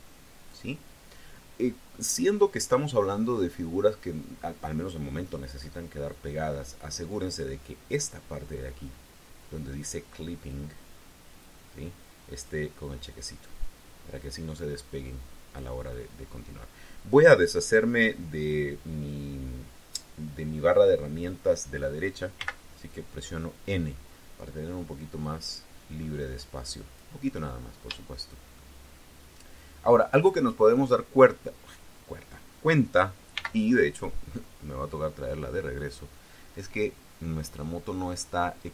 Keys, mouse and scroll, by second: 10.4-11.5 drag, 12.2 click, 13.5-15.6 drag, 22.2 n, 25.1-27.0 drag, 28.4-30.8 shift+drag, 33.2 n, 35.3-36.6 scroll up 6.